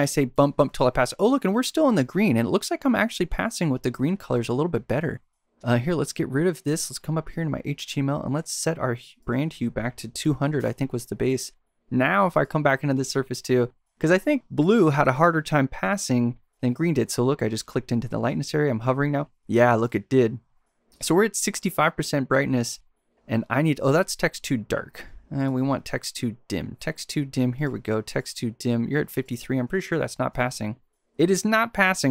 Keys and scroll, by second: 0.0 Up, 9.9-10.7 typing, 18.3 shift+super+c, 29.7 shift+super+c.